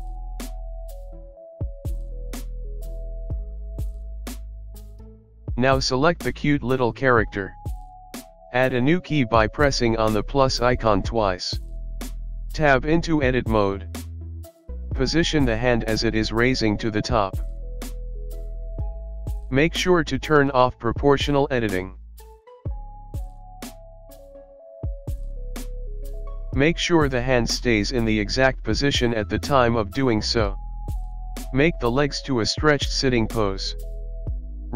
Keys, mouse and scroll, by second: 1.9 space, 3.5 space, 4.8 click, 6.2 click, 8.0 click, 8.2 click, 8.9 Tab, 10.5 KP_1, 11.0-11.4 scroll up 4, 19.6 l, 22.5 click, 23.6 r.